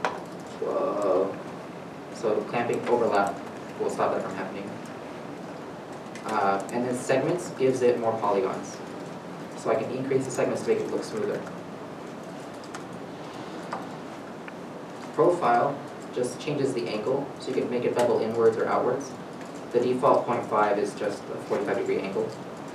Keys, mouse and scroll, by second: 3.4 middle click, 20.2 0, 20.4 5, 20.6 Return, 22.5 middle click.